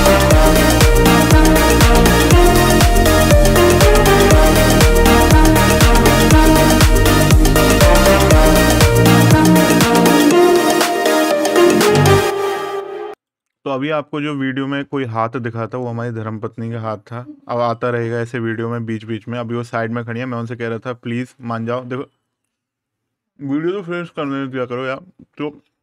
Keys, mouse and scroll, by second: 11.2 click.